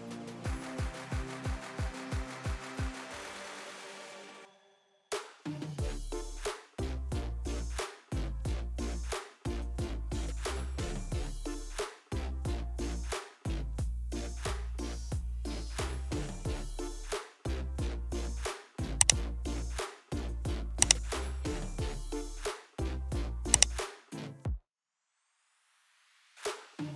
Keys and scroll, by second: 12.0 ctrl+g.